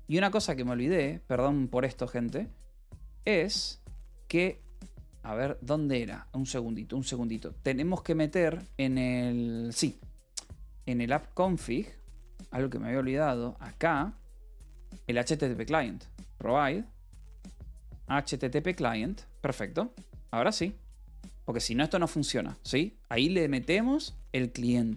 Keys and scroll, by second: 0.4 s, 0.7 v, 2.2 ctrl+p, 3.3 Return, 3.4-4.7 typing, 8.4 space, 9.5-12.4 typing, 13.5-17.0 typing, 18.2 shift+h, 18.3 Return, 19.9-20.8 typing, 21.3 ctrl+s, 24.7-24.9 typing.